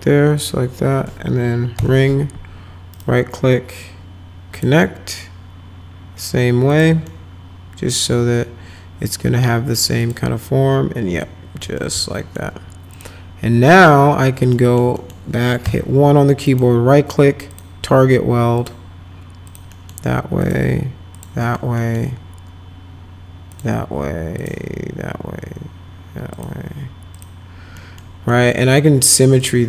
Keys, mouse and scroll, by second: 0.4 ctrl+click, 1.8 Right, 2.9 right click, 4.6 click, 6.7 click, 7.1-8.1 alt+middle drag, 10.0 click, 11.2 alt+middle click, 12.0 alt+middle click, 12.9 click, 14.6 alt+middle click, 15.0 middle click, 15.6 1, 16.5 right click, 17.5 click, 18.6 click, 19.5 click, 19.7 middle click, 20.4 click, 21.2 click, 21.5 middle click, 21.8 middle click, 23.5 click, 24.4 click, 26.3 click, 27.1 click, 27.8 middle click, 28.3 middle click, 29.4 click.